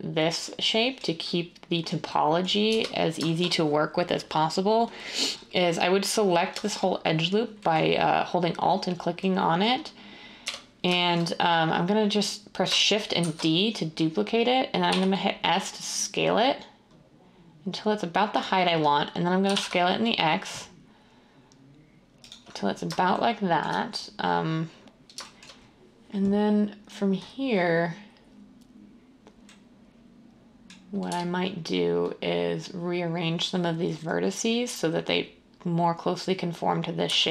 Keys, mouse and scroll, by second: 2.7 1, 10.4 1, 13.2 d, 14.9 s, 19.4 typing, 22.2 s, 31.1 1, 37.0 z.